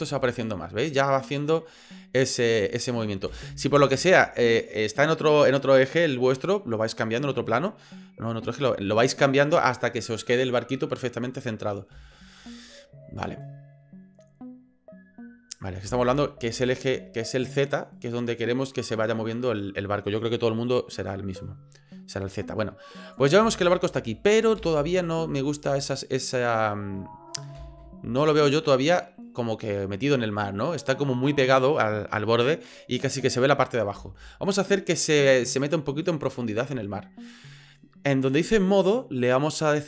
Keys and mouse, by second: 3.3 space, 11.9 space, 15.9 space, 23.0 click, 23.4 space, 24.6 space, 26.9-27.4 ctrl+drag, 28.4 middle click, 28.7 click, 29.1 click, 34.0 space, 35.0-36.1 drag, 38.8-39.8 drag.